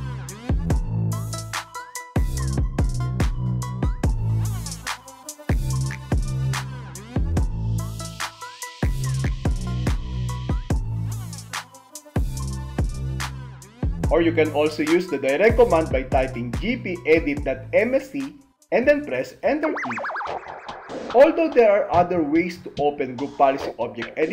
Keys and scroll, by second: 0.0 alt+a, 2.0 Return, 3.2 Return, 5.5 End, 12.0 super+r, 13.0 BackSpace, 20.1 Return.